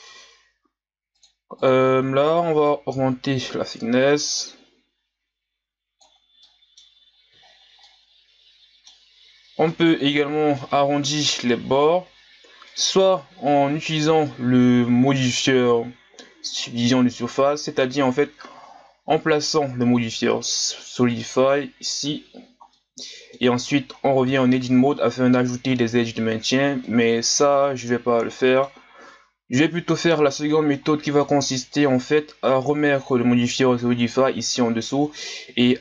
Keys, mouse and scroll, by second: 6.5-6.9 middle drag, 6.9-7.5 scroll up 1, 7.5-7.8 scroll down 4, 7.8-9.1 middle drag, 9.1-9.7 scroll up 1, 9.7-11.3 middle drag, 11.3-12.2 scroll down 1, 12.2-12.7 scroll down 1, 12.7-13.8 middle drag, 13.8-21.1 drag, 22.7-23.6 middle drag, 23.6-24.1 scroll down 6, 24.4 shift+scroll up 4, 24.9 Tab, 25.2 scroll up 2, 26.3 scroll down 2, 26.9 middle click, 27.5-28.0 scroll down 3, 28.3 middle click, 28.9-29.8 scroll up 2, 29.8-30.2 scroll down 1, 30.5 middle click, 31.2 Tab, 32.8-34.0 drag.